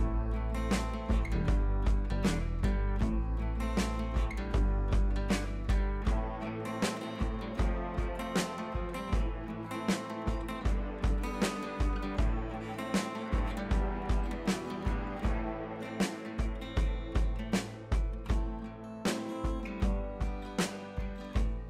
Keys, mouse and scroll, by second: 0.7 click, 1.3-1.8 scroll up 2, 4.9 click, 11.1-11.5 click, 14.2 t, 14.9 click, 16.9 click, 18.7 ctrl+c, 19.1 click, 19.7 ctrl+v, 20.7 ctrl+a, 21.3-21.6 drag.